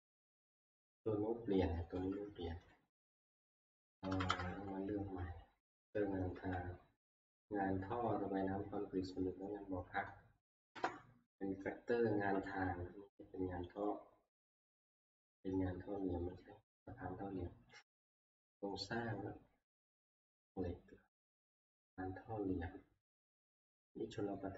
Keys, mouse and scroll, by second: 0.8 scroll down 2, 5.5 ctrl+Up, 5.5 middle click, 5.7 ctrl+c, 6.1 Down, 6.3 Down, 10.7 click, 10.8 Return, 13.8 Return, 13.8 click, 17.9 click, 21.3 click, 22.0 scroll.